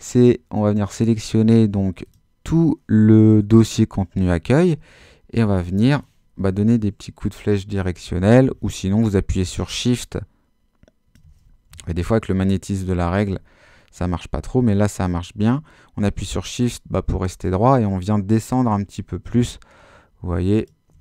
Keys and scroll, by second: 6.5 Down, 11.7 shift+super+z, 12.3 super+z.